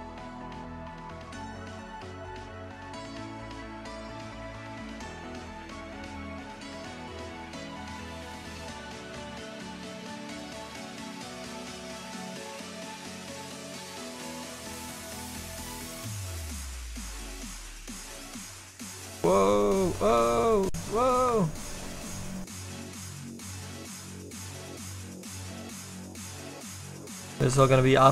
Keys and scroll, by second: 9.6 s, 10.1 s, 23.2 s.